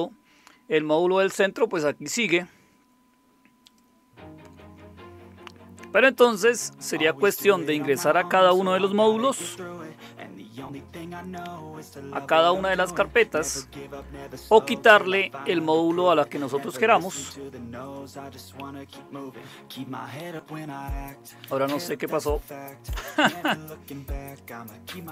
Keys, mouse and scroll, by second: 3.7 click, 6.2 click, 9.3 super+Return, 17.9 click, 20.2 click, 21.8 click, 25.0 click.